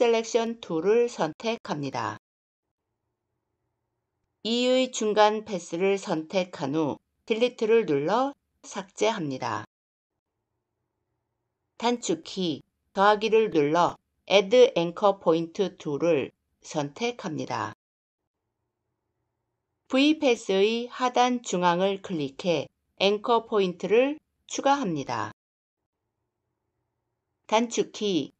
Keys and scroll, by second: 7.2 Delete.